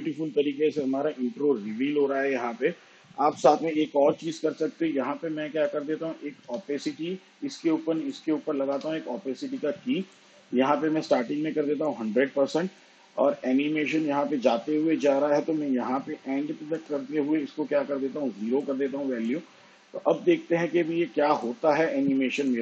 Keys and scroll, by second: 5.7 space, 8.5 t, 10.8 t.